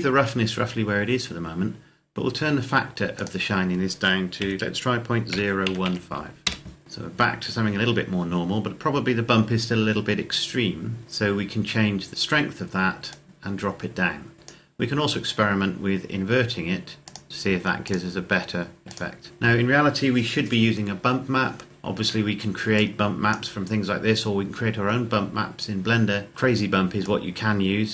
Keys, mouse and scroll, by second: 2.9 click, 4.1 KP_Decimal, 5.1 KP_0, 5.4 KP_1, 5.6 KP_5, 6.5 KP_Enter, 7.0-7.9 scroll up 1, 13.1 click, 17.3 click, 21.7 scroll down 1, 22.8 click, 26.1 scroll up 1, 27.1 click.